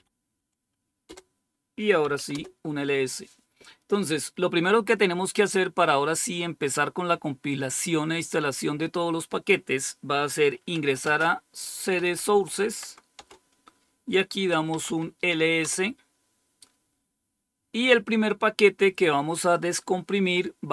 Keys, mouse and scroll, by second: 0.9 typing, 2.0 Return, 10.6-12.8 typing, 13.0 Return, 14.3-16.0 typing.